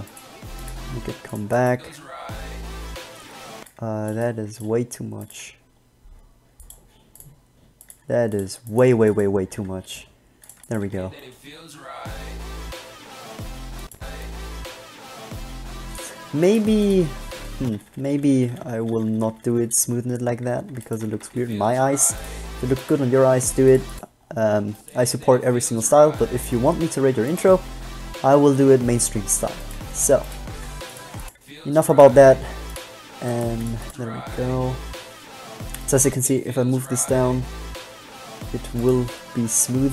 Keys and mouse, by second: 1.0 g, 3.8 alt+a, 5.5 g, 8.1 g, 9.2 b, 9.6 g, 10.4 click, 11.0 alt+a, 16.8 click, 17.8-20.0 ctrl+z, 20.4 ctrl+z, 21.2 alt+a, 21.4 alt+a, 23.2 g, 30.0 g, 30.8 g, 32.2 g, 33.6 g, 35.8 g.